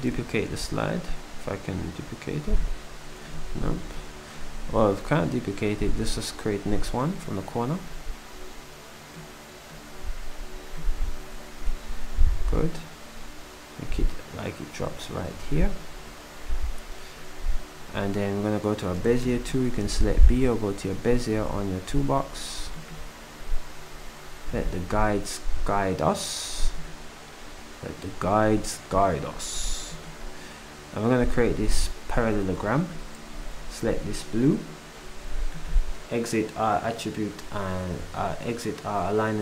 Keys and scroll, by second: 19.3 b, 31.5 s.